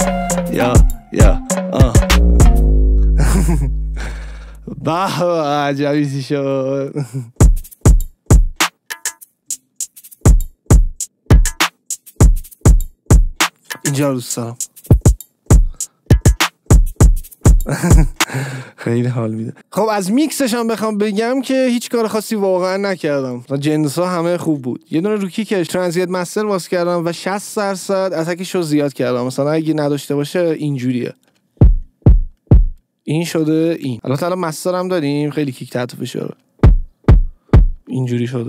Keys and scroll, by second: 7.3 space, 18.1 space, 31.5 space, 32.8 space, 36.5 space, 37.9 space.